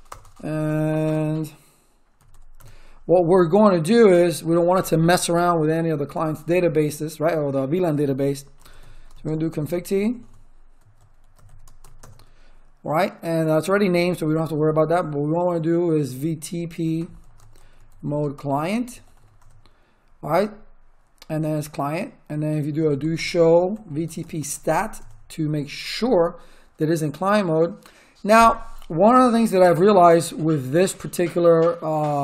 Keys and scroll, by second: 0.0 Return, 1.9-2.7 typing, 8.3-12.3 typing, 16.4-19.6 typing, 22.5-25.1 typing.